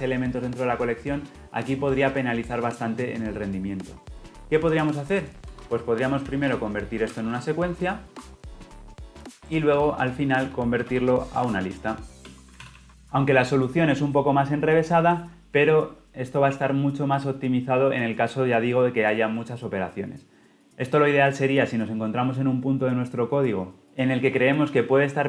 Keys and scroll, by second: 8.0 Return, 11.1 Tab, 12.2 Return, 12.7 ctrl+alt+o.